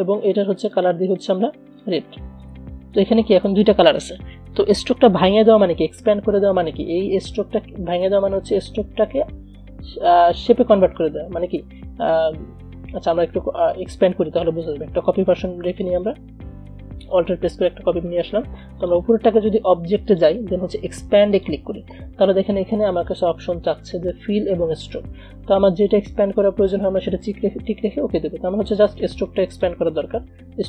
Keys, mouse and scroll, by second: 15.5 alt+Num_Lock, 16.0-17.6 alt+drag, 17.6-19.0 scroll down 2, 19.0-26.0 drag, 29.6-30.6 drag.